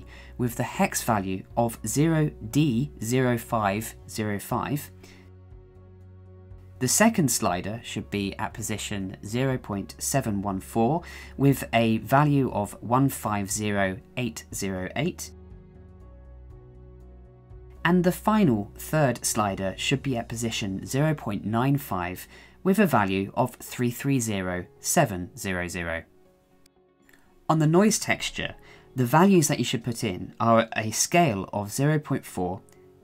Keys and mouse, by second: 8.4-9.0 drag, 27.0 shift+middle click, 27.9 shift+middle click, 31.3-33.0 drag.